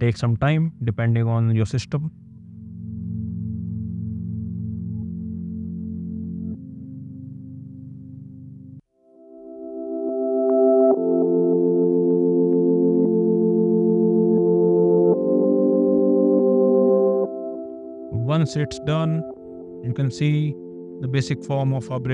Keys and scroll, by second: 16.0 space.